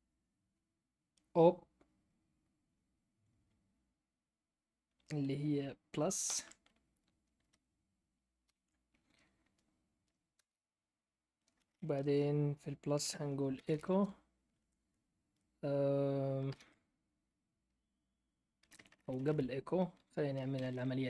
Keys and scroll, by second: 8.4 ), 10.3 Return, 13.0-14.1 typing, 16.4 ", 18.6-21.0 typing.